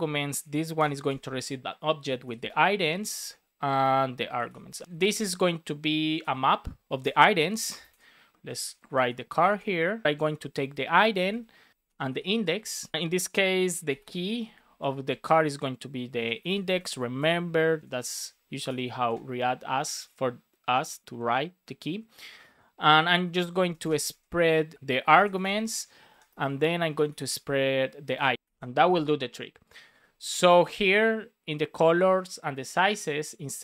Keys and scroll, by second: 0.7 shift+[, 1.0 space, 3.1 space, 4.7 BackSpace, 4.9 shift+., 5.1 space, 6.9 Return, 7.6-9.4 typing, 10.0 Right, 11.0 BackSpace, 11.8 space, 12.9 Left, 14.6 shift+[, 14.9 shift+], 15.2 Left, 16.7 Right, 17.1 space, 17.8 Left, 18.0 Right, 18.6 BackSpace, 19.0 space, 22.8 shift+[, 23.4 shift+], 23.7 space, 23.8 Left, 25.6 Right, 26.0 space, 26.3 shift+[, 28.7 super+s.